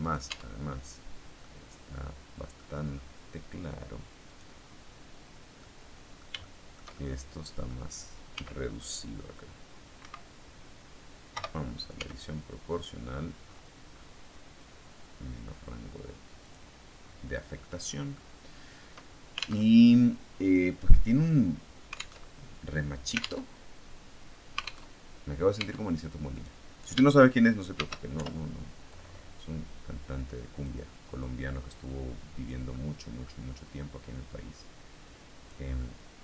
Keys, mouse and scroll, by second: 1.3-2.6 middle drag, 2.6-4.1 scroll up 1, 5.5-7.7 middle drag, 8.2 s, 9.9 Escape, 11.2 q, 11.8 s, 13.0-13.6 scroll up 2, 13.6-14.2 scroll up 1, 14.3-15.0 scroll down 2, 16.3 click, 16.9-17.5 scroll down 2, 17.5 middle click, 19.6 alt+Tab, 22.2 alt+Tab, 23.4 alt+Tab, 24.8 alt+Tab, 25.5 Tab, 26.2 right click, 27.6 shift+d, 28.1 shift+Return, 28.8-30.8 drag, 31.1-32.6 drag, 33.0 middle click, 34.0-35.6 drag, 35.7-36.2 middle drag.